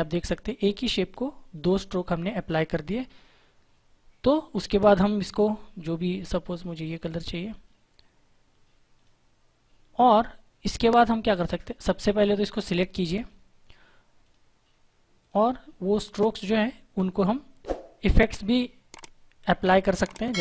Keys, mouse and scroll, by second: 0.2 click, 5.3 click, 8.9 click, 11.1 click, 20.0 click.